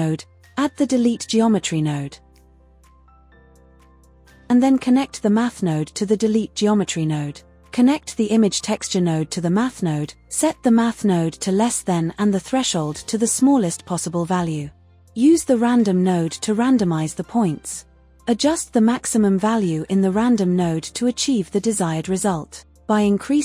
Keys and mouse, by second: 1.3 shift+a, 4.4-8.1 drag, 8.2-9.4 drag, 10.1-13.1 drag, 13.1 KP_0, 13.4 KP_0, 18.4 drag, 21.4-23.4 drag.